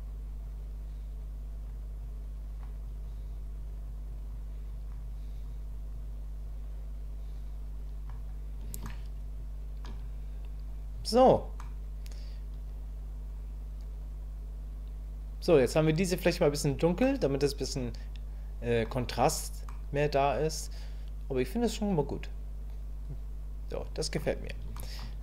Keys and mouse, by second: 8.9-11.6 shift+drag, 17.0-18.2 middle drag, 19.7-24.1 middle drag, 24.8 shift+middle click.